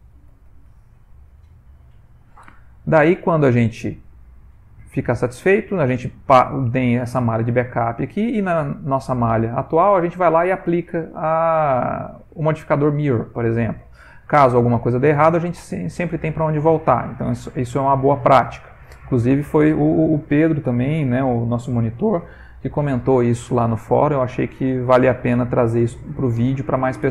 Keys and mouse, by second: 8.8 click, 11.7 click, 12.2 click, 13.7 middle click, 13.8 middle click, 14.2 ctrl+middle click, 14.3 ctrl+middle click, 14.8 middle click, 16.7-17.6 ctrl+middle click, 17.2 middle click, 17.3 middle click, 17.4 middle click, 17.5 middle click.